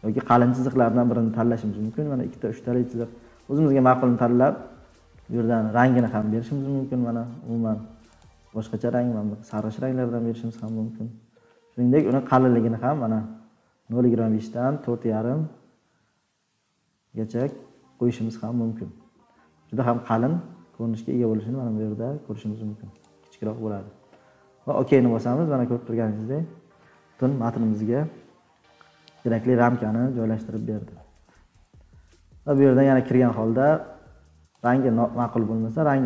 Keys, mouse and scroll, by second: 10.6-11.0 drag, 12.0 click, 23.0 click, 24.9 click, 25.3-26.3 scroll, 26.5-27.3 scroll down 10, 27.4 scroll, 28.1-29.5 scroll, 30.0 scroll down 10, 30.6-31.0 scroll down 4, 31.1 scroll, 32.5 click, 34.6 scroll.